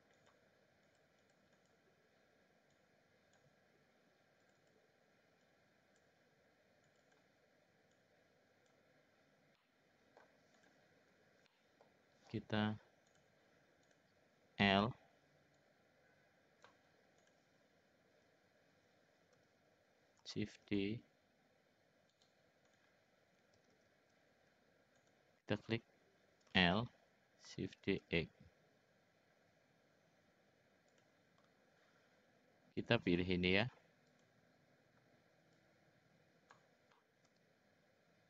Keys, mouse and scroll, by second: 1.3 click, 1.5 click, 2.7 click, 4.5 click, 4.6 click, 5.4 click, 6.8 click, 7.9 click, 9.5 middle click, 10.6 click, 11.5 middle click, 13.1 click, 14.8 l, 15.5-16.7 drag, 17.2 click, 19.3 l, 20.5 shift+d, 22.7 click, 23.5 ctrl+z, 23.8 ctrl+z, 24.0 ctrl+z, 25.0 click, 26.5 l, 27.7 shift+d, 32.7-34.2 drag, 35.5-36.5 drag, 37.3 s.